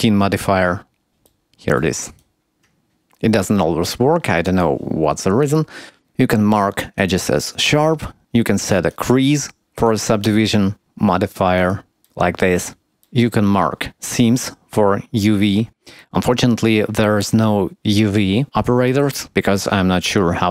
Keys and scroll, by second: 2.8 Tab, 3.6 Tab, 3.8 Tab.